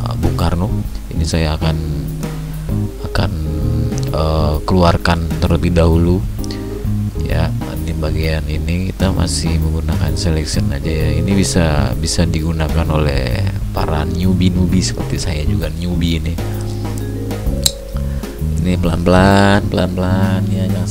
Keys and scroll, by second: 11.2 ctrl+alt+z.